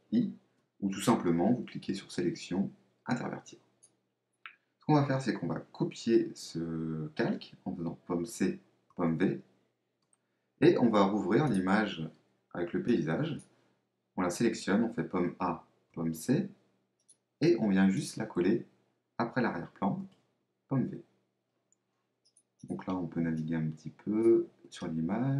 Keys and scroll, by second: 0.1 shift+super+i, 8.3 super+c, 8.9 super+v, 14.9 super+a, 15.9 super+c, 20.0 super+v.